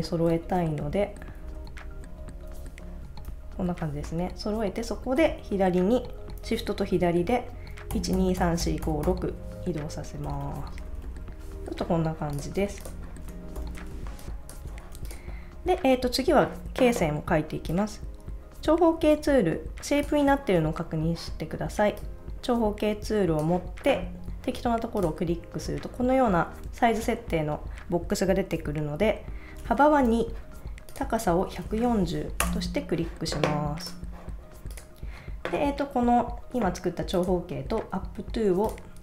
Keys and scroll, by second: 0.7 shift+Up, 1.7 Up, 3.5 Up, 12.6 super+s, 13.9 space, 30.1 2, 31.1-32.4 typing, 32.4 Return.